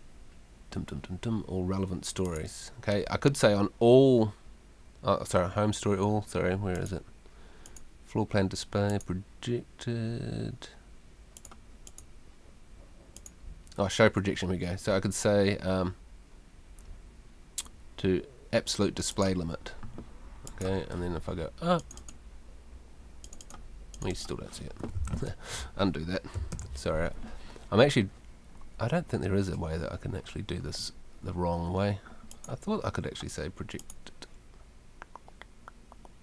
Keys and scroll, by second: 25.1 super+z, 26.5 super+t.